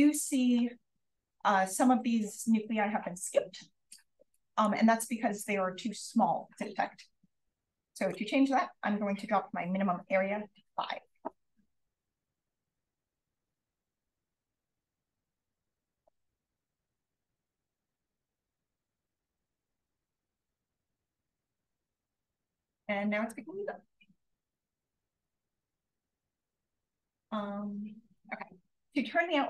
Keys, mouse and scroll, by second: 4.3 click, 7.9 click, 13.5 click, 24.3-26.3 scroll down 1, 25.1 click, 25.9-26.2 drag, 26.3-27.7 scroll up 1, 27.6-27.9 drag.